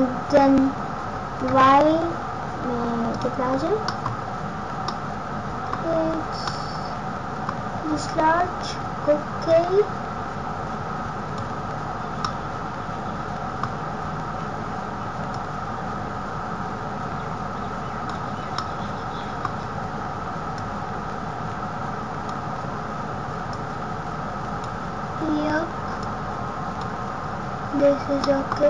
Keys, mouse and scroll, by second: 3.9 middle click, 4.4 scroll down 1, 4.7 scroll up 1, 4.9 middle click, 5.8 scroll down 1, 6.4 middle click, 6.4-6.9 scroll down 2, 7.5 scroll down 1, 9.4 click, 11.9-12.3 scroll up 2, 12.2 middle click, 14.0 scroll down 1, 15.2 click, 18.4 scroll up 1, 18.5 middle click, 20.5 click, 23.5 click, 26.0 click, 27.8 scroll up 1, 28.1 middle click.